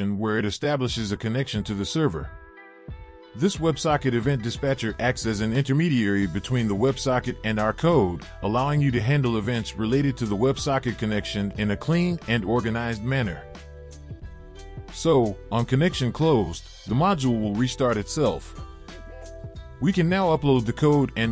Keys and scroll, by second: 0.0 Return, 0.5 ctrl+v, 2.5 ctrl+z, 4.0 ctrl+x, 5.8 Return, 6.3 ctrl+v, 12.2 Return, 12.4 Return, 12.6 ctrl+v.